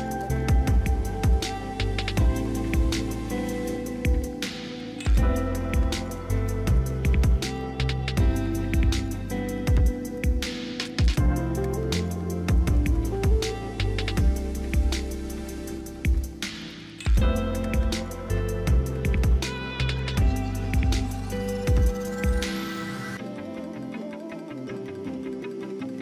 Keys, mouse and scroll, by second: 4.5 double click, 25.4 double click.